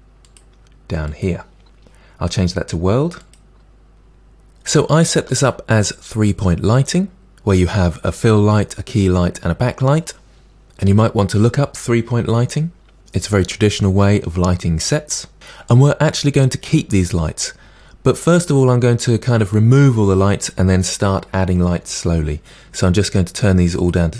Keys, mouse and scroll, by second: 3.2 click, 4.7-6.3 middle drag, 6.3 click, 23.8-24.1 drag.